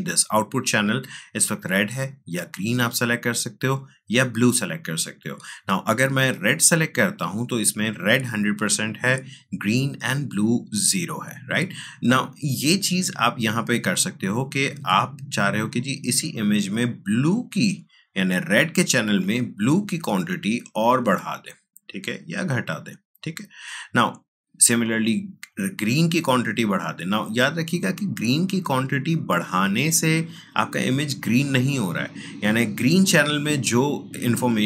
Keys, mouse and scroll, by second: 1.0 click, 20.0-32.0 drag.